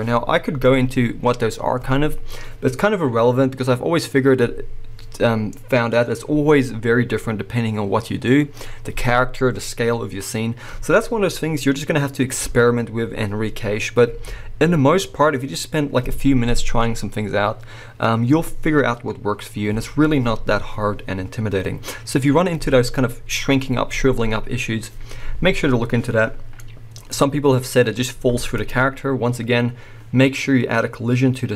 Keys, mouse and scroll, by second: 26.6-28.6 middle drag, 28.6 click, 29.7-31.5 scroll up 2.